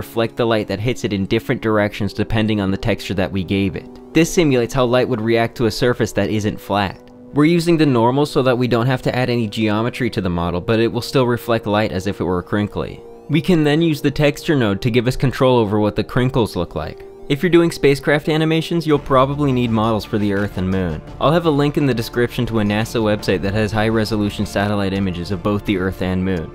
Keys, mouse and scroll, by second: 0.2 click, 0.8 click, 1.4 shift+a, 3.9 ctrl+shift+click, 5.0 shift+middle click, 8.8 g, 12.3 click, 12.4 Tab, 12.6 1, 13.0 click, 13.2 g, 14.9 click, 15.8 click, 16.4 click, 16.9 click, 17.2 click, 17.3-18.6 drag.